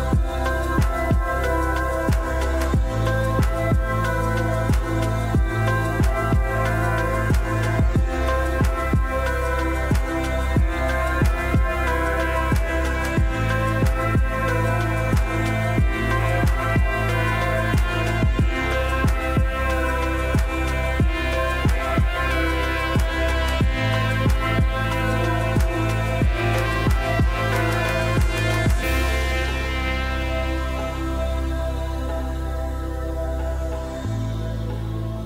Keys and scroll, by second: 32.3 r, 33.6-34.3 typing.